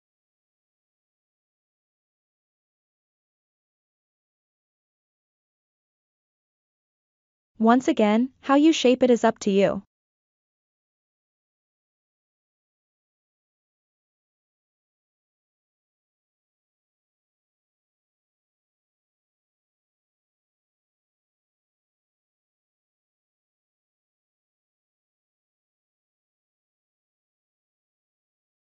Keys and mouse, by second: 0.4 alt+z, 1.4-1.9 ctrl+middle drag, 2.3 shift+middle click, 4.0 e, 8.2 e, 11.3 e, 13.5 e, 17.3 e, 21.2 ctrl+click, 22.0 ctrl+click, 23.1 ctrl+click, 24.0 ctrl+click, 27.4 Tab.